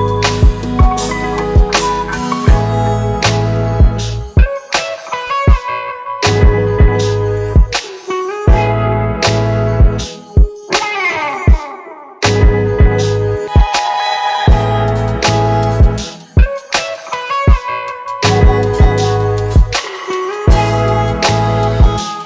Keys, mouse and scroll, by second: 5.7 double click.